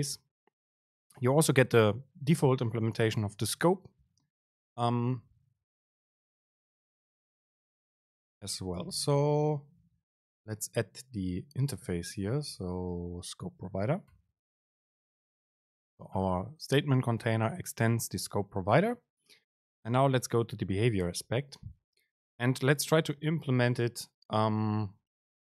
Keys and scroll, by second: 6.1 End, 7.1 super+space, 22.1 End, 23.6 End, 23.8 ctrl+i.